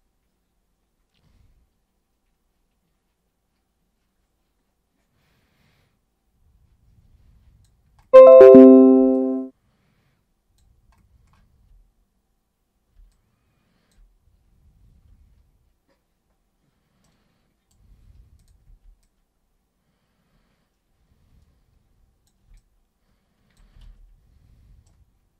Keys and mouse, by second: 9.1-10.6 alt+super+drag, 13.1-13.9 alt+super+drag, 17.1 super+right click, 18.4 click, 18.7 super+w, 19.0-22.3 drag, 22.5-23.6 alt+drag, 24.9 right click.